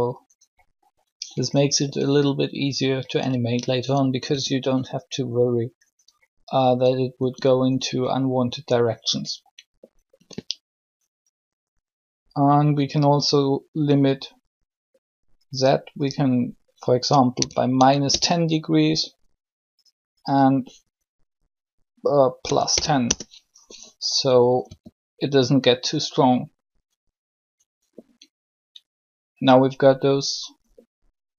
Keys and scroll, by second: 4.3 r, 7.2 r, 17.1-17.8 typing, 22.4 typing, 22.8 Return, 24.6 r.